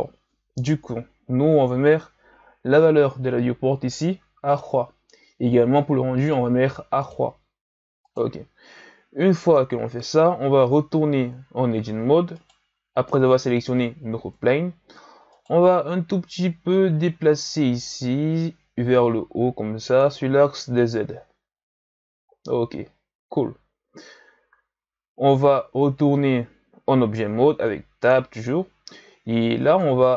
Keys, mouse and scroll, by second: 4.4-8.1 drag, 12.4 right click, 14.1 Tab, 15.3 right click, 16.7-19.8 drag, 20.3 Tab, 21.5-22.3 scroll down 4, 22.3-22.9 ctrl+scroll down 2, 22.9-25.9 scroll up 1, 29.7-30.1 drag.